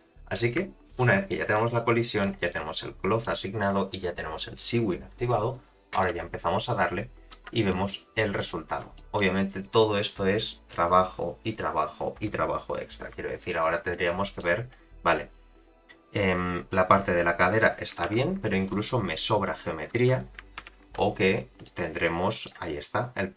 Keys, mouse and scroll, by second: 1.0 shift+middle click, 1.5-2.2 middle drag, 2.4 click, 3.2-3.6 middle drag, 5.9 space, 7.4 space, 7.7-8.4 middle drag, 8.6 scroll down 3, 8.9 shift+middle drag, 13.9-14.4 middle drag, 14.7-15.4 scroll up 2, 15.4-17.9 scroll up 1, 18.1 shift+Left, 18.7 space, 20.0 space, 20.6 shift+Left, 21.6-22.5 middle drag.